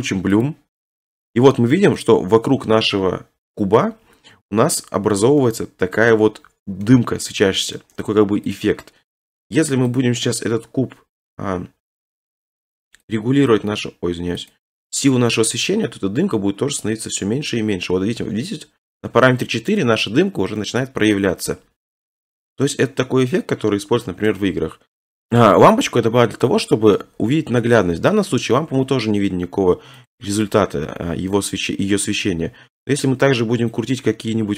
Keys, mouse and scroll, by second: 0.4 click, 2.0 middle click, 4.6 middle click, 6.8 scroll, 7.8-8.6 scroll, 8.6 click, 10.0 click, 10.4-10.7 scroll, 11.2-11.7 scroll, 12.2-13.5 scroll, 13.5 click, 14.5 click, 19.7 click, 20.2 scroll down 3, 21.7-22.1 scroll, 22.5-23.1 scroll, 24.3 middle click, 25.0 middle click, 26.4 click, 26.6 scroll, 27.0 shift+middle click, 27.1-27.4 scroll, 30.1 click, 31.2 scroll.